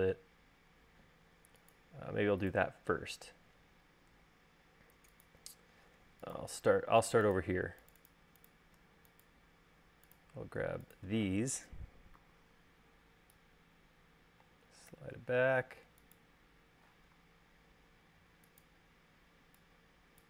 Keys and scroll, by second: 12.3 v.